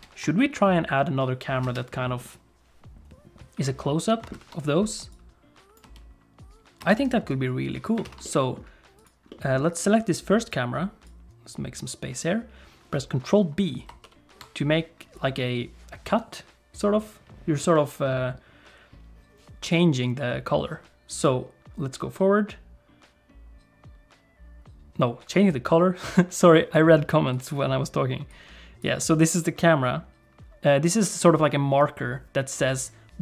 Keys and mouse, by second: 0.0 ctrl+space, 1.7 space, 4.4 ctrl+s, 5.2 click, 5.9 space, 6.9 space, 7.3 click, 8.1 ctrl+s, 8.2 middle click, 9.3 middle click, 10.4 click, 11.1-12.3 drag, 14.0 ctrl+b, 21.2-26.8 drag, 27.3 click, 28.3 click.